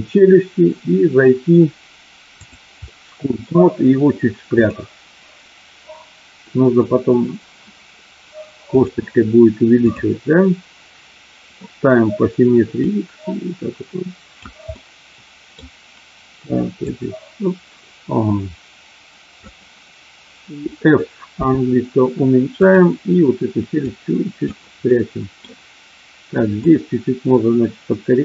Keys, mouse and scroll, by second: 2.5 click, 2.8 middle click, 4.7-6.5 drag, 8.7-10.0 drag, 12.8-14.4 drag, 14.9 middle click, 16.9-19.4 drag, 21.3 f, 23.8 click, 24.8 middle click, 26.7-28.2 drag.